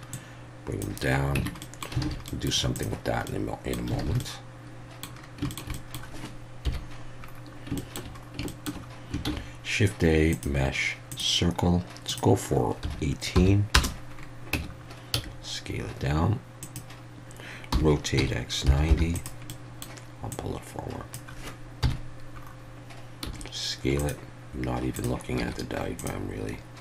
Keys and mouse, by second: 0.1 click, 1.4 Tab, 1.6 middle click, 2.0 alt+a, 2.3 middle click, 2.8 click, 3.2-3.7 middle drag, 4.0 alt+a, 4.2-5.0 middle drag, 5.5 shift+middle drag, 5.7 middle click, 6.6 KP_1, 7.8 shift+middle drag, 8.5 shift+middle click, 9.2 shift+a, 12.1-14.4 drag, 14.5 Tab, 15.1 s, 16.6 click, 17.7 r, 18.2 x, 18.6 9, 18.9 0, 19.1 click, 19.5 middle click, 20.3 click, 21.8 KP_1, 23.2 s, 23.9 click, 25.4 z.